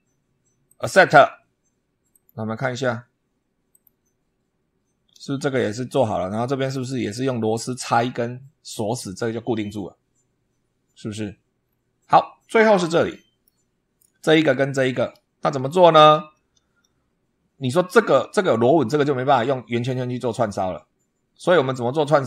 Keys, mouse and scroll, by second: 0.5 click, 1.9 click, 3.5 click, 4.3-4.7 scroll up 1, 11.5-11.8 scroll down 1, 12.7 shift+middle click, 14.9-15.3 scroll up 1, 15.6 shift+middle click, 16.2-16.5 shift+scroll up 2, 21.6 scroll down 2.